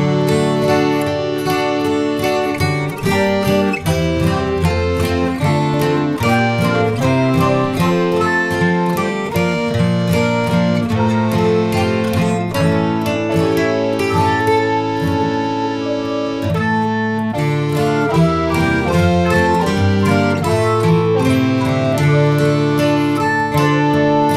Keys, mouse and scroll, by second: 3.1 KP_0, 4.9 s, 9.2 ctrl+s, 9.7 click, 10.8-16.1 drag, 16.1 scroll down 2, 16.2-18.1 drag, 18.1-19.7 middle drag, 19.7 KP_7, 20.1-20.5 scroll down 1, 20.5-21.0 middle drag, 21.0 scroll down 2, 21.3-22.1 middle drag, 22.1-22.9 scroll up 10, 23.1-24.2 middle drag, 24.2-24.3 shift+scroll up 1.